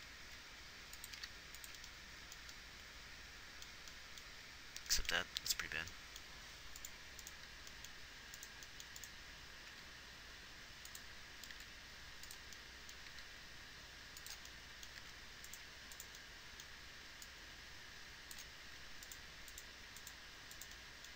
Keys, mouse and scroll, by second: 0.6 r, 1.5 g, 5.7 a, 10.0 g, 12.0 r, 13.5 g, 15.3 a, 18.9 a.